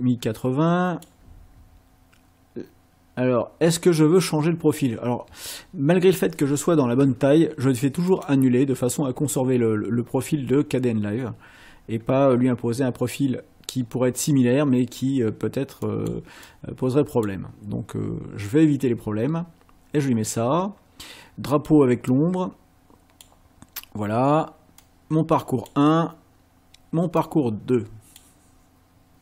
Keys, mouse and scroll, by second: 8.1 click, 15.8 click, 16.4 click, 21.5 click, 22.1-23.4 drag, 24.8 click, 27.2-28.3 drag.